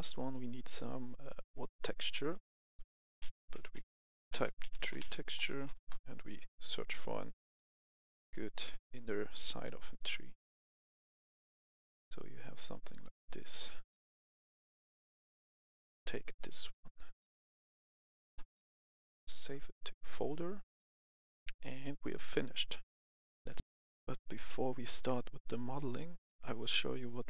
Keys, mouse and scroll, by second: 0.1 click, 3.1-5.6 typing, 5.7 Return, 7.5 click, 10.7-12.1 scroll down 1, 15.6-16.8 drag, 18.5 right click, 19.3 click, 21.0 F10, 23.5 click, 23.6 F10, 26.9 click.